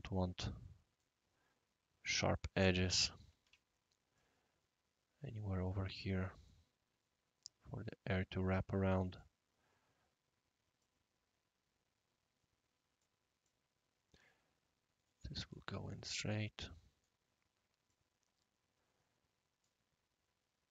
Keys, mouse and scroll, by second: 2.6 click, 3.4 Delete, 4.1-5.7 drag, 6.4 click, 10.8-13.0 drag, 13.4-15.5 drag, 16.2 click, 17.9 click, 20.3 scroll down 1, 20.5 scroll up 1, 20.5-20.7 middle drag.